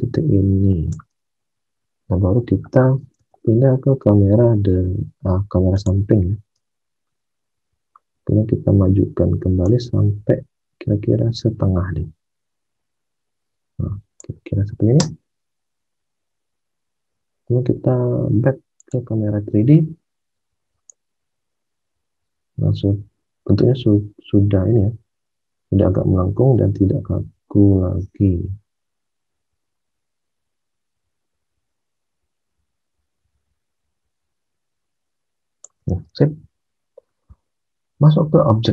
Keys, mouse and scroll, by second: 3.1 space, 6.5 space, 14.9 space, 19.0 space, 35.7 alt+Tab.